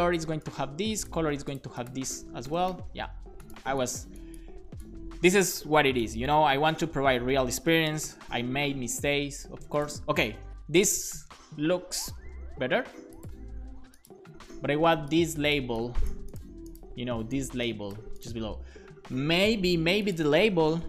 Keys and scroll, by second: 2.3 Return, 2.5 super+v, 2.7 super+s, 6.7 BackSpace, 7.3 super+s, 7.9 alt+shift+f, 8.2 super+s, 20.8 Return.